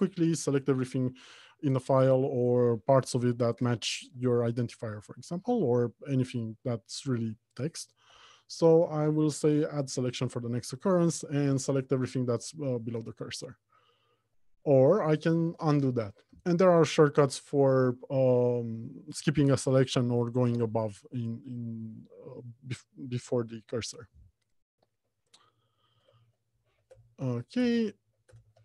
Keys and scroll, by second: 8.4 alt+j, 15.1 alt+shift+j, 16.7 Escape, 26.4 alt+Home, 26.6 Left, 27.1 Return.